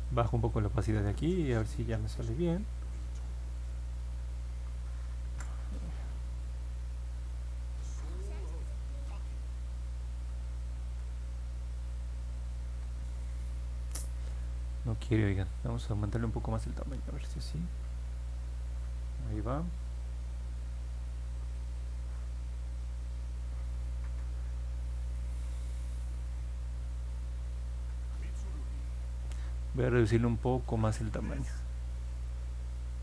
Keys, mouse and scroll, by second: 0.0 click, 3.4 click, 5.2 ctrl+z, 6.7 click, 8.5 ctrl+z, 9.7 click, 10.7 ctrl+z, 11.5 click, 12.8 ctrl+z, 27.7 ctrl+z.